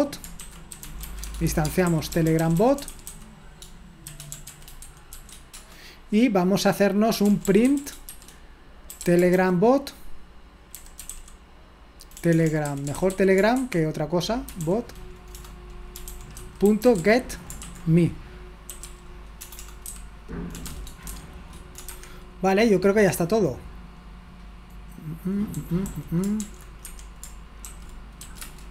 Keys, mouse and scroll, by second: 0.0-5.1 typing, 6.9-21.8 typing, 21.9 Escape, 25.5-28.7 typing.